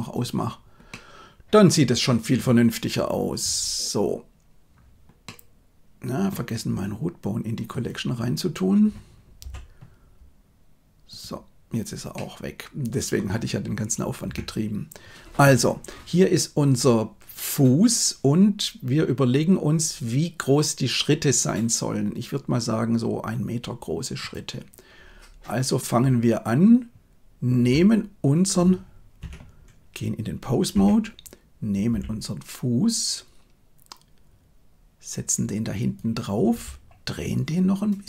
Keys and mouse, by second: 0.0 click, 0.8-2.0 middle drag, 3.3 KP_1, 5.1-6.2 middle drag, 7.6 right click, 9.3 m, 12.0-13.1 middle drag, 14.1 KP_1, 27.5 g, 30.6 Tab, 31.8 g, 36.4 r.